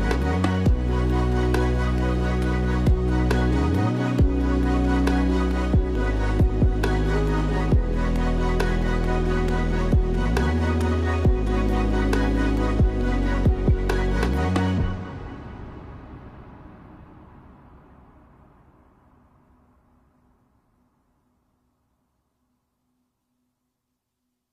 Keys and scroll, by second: 1.5 space, 7.0 space, 9.8 Delete, 11.0 Delete, 21.9 space, 23.6 space.